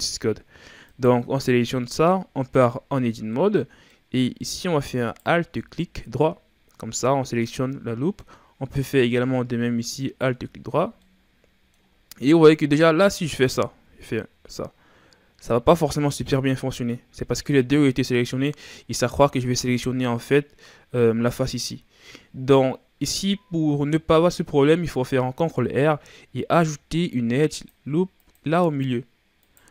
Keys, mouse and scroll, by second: 0.9 right click, 2.2 Tab, 3.3-5.0 middle drag, 5.0 alt+right click, 6.1-9.1 middle drag, 10.0 alt+shift+right click, 10.8 scroll down 1, 11.0-13.8 middle drag, 13.8 ctrl+b, 18.8-21.2 scroll up 1, 25.3 ctrl+r, 29.4 right click.